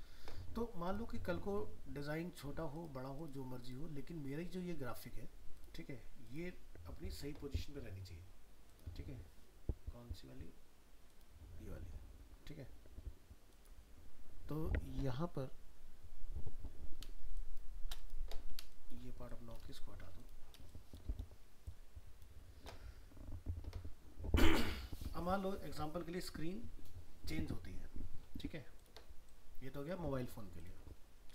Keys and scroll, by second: 31.2 ctrl+-.